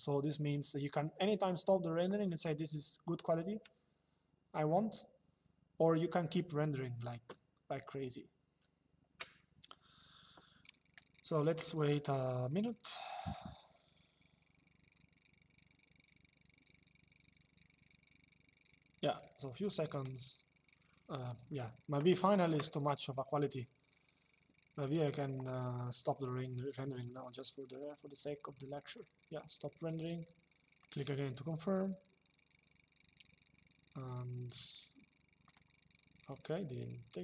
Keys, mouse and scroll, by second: 28.5 click, 30.5 click, 35.2 click.